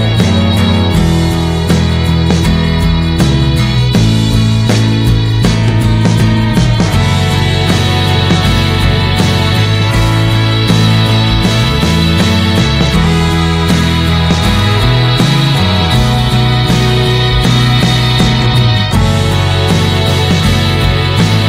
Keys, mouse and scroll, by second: 0.0 click, 1.2 click, 1.7-3.6 middle drag, 3.6 click, 5.1-7.6 middle drag, 7.6 click, 8.3 /, 8.7 middle click, 8.9 scroll up 1, 9.2-11.0 middle drag, 11.0-18.0 drag, 19.6 click, 20.3-21.4 drag.